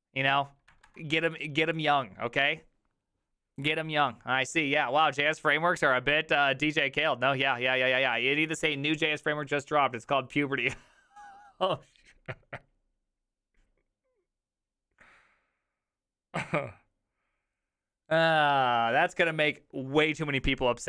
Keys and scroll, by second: 0.9 alt+f.